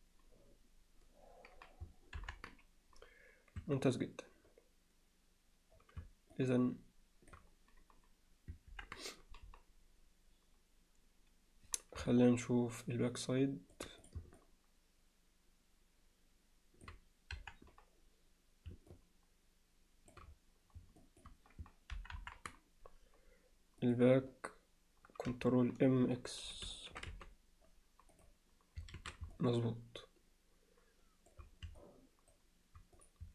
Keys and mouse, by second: 2.2 ctrl+KP_1, 3.6 Tab, 6.3-7.3 alt+middle drag, 8.7 ctrl+KP_1, 12.5-13.8 alt+middle drag, 14.1 drag, 14.4-16.9 middle drag, 17.4 KP_1, 18.9-20.1 middle drag, 21.0 alt+middle click, 22.2 ctrl+KP_1, 23.8 click, 26.7 ctrl+m, 29.0 alt+a, 29.4-31.3 alt+middle drag, 31.8-32.3 alt+middle drag.